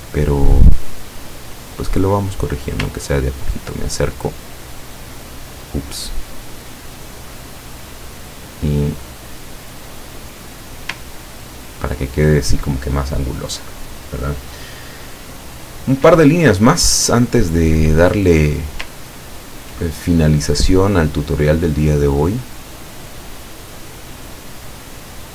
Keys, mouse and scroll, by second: 1.0-2.5 drag, 3.1-3.7 ctrl+scroll up 1, 4.1 ctrl+click, 4.5 ctrl+click, 6.4 click, 7.6 click, 9.3-11.1 drag, 11.2-11.6 ctrl+scroll down 2, 11.7 ctrl+scroll down 2, 17.0 click, 19.3 ctrl+scroll up 2, 23.3 click, 24.8 click.